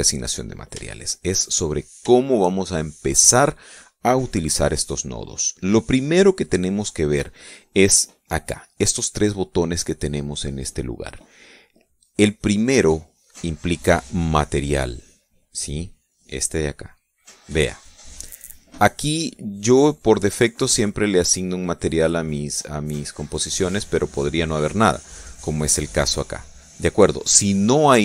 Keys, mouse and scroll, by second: 0.9 middle click, 1.7 shift+middle click, 2.0 shift+middle click, 2.7 shift+middle click, 3.3 shift+middle click, 16.9 click, 21.9 click, 23.6 click, 24.7 click.